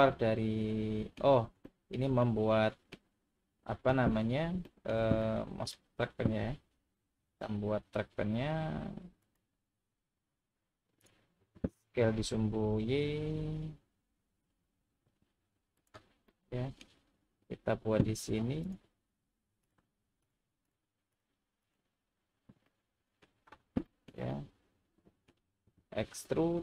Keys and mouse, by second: 1.6 shift+middle click, 2.2 middle click, 5.2-5.7 middle drag, 7.2 ctrl+r, 11.0 click, 11.9 s, 12.6 y, 15.7 click, 16.3 middle click, 18.7 click, 20.2 shift+click, 20.7 shift+click, 21.6 shift+click, 22.7 middle click, 23.8 shift+middle drag, 24.3-25.3 middle drag.